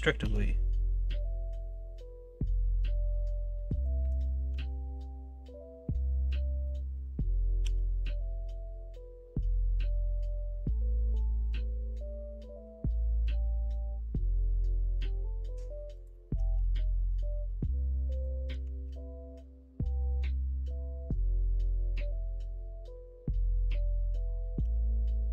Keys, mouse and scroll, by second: 16.6 ctrl+z, 16.9-18.2 middle drag, 18.8 ctrl+b.